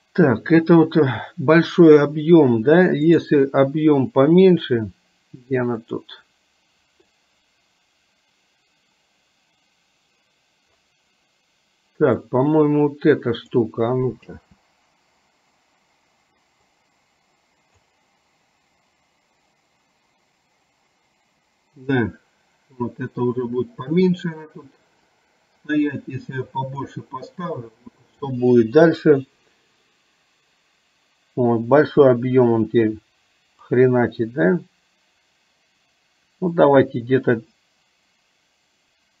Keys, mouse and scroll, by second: 3.2 click, 12.5-13.6 drag, 14.4 space, 16.9-18.0 drag, 25.2-27.1 drag, 33.9-39.2 drag.